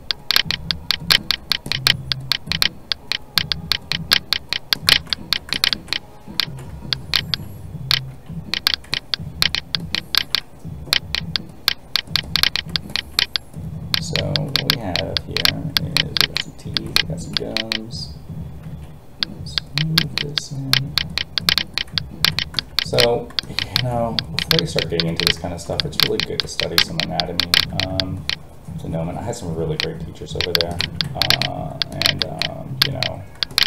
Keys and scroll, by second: 6.4 alt+a, 18.7 alt+a, 23.7 alt+a.